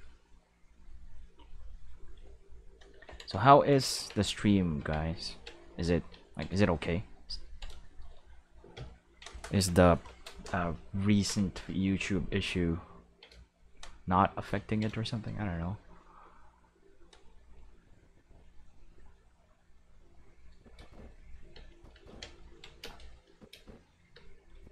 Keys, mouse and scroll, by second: 3.9 ctrl+Tab, 4.8 ctrl+Tab, 5.3 ctrl+click, 6.2-7.7 ctrl+shift+middle drag, 7.8 shift+middle click, 9.9 Home, 11.6-13.6 ctrl+middle drag, 17.5-20.6 drag, 20.8-24.7 typing, 21.7 click, 23.2 click, 24.5 click.